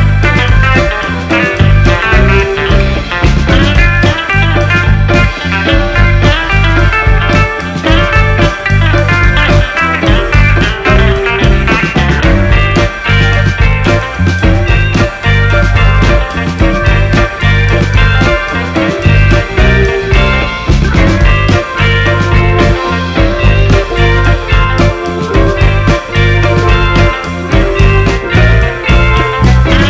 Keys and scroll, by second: 9.1-11.0 typing, 24.4-26.1 typing, 28.1 v, 28.5 BackSpace, 28.7 c, 28.9 l.